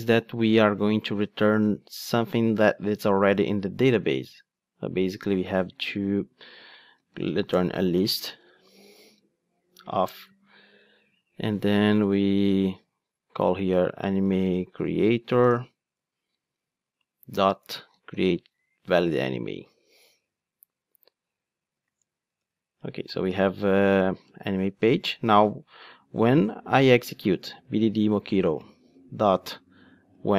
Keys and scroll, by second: 10.2 Return, 16.1 Return, 22.3 alt+Return, 24.2 Return.